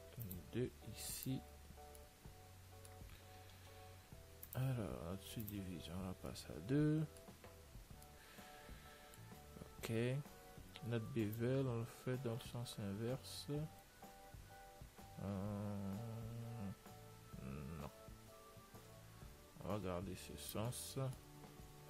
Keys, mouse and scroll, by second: 2.4-4.2 middle drag, 4.8-7.6 drag, 6.6-11.7 middle drag, 10.2 Tab, 11.7 click, 21.2 Tab, 21.5-21.8 middle drag.